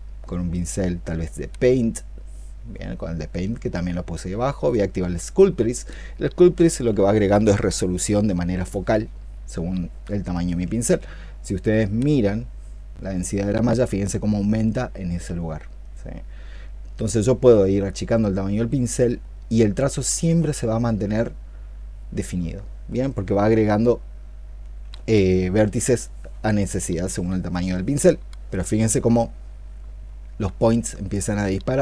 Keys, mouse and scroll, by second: 15.1-16.0 ', 19.7 ', 19.9 ', 20.1 ', 20.9 '.